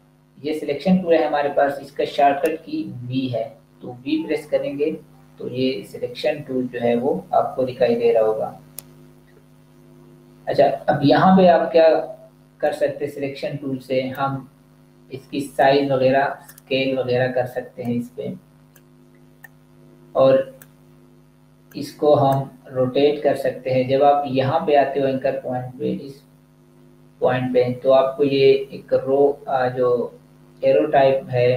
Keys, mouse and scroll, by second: 12.5 click.